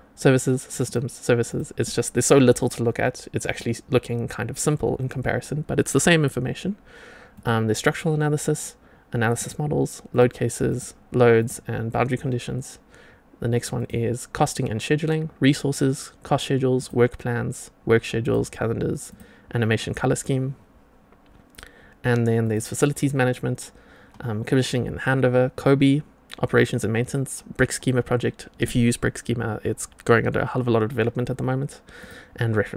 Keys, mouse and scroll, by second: 0.8 click, 1.4 click, 3.3 click, 7.3 click, 9.3 click, 10.0 click, 10.6 click, 11.3 click, 13.7 click, 16.7 click, 18.1 click, 19.0 click, 22.4 click, 31.9 click.